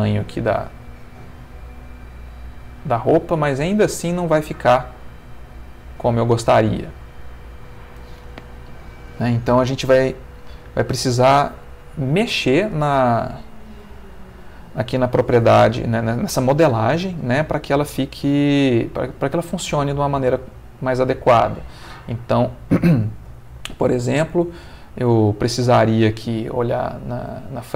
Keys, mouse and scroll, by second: 0.5 space, 3.2-4.8 middle drag, 6.9 Escape, 8.8-10.1 middle drag, 10.9 middle click, 12.5 middle click, 13.4 ctrl+middle click, 13.9 ctrl+middle click, 15.5 middle click, 16.4-19.3 middle drag, 19.9-22.1 middle drag, 22.4-23.5 middle drag, 24.6 Tab, 26.2 click.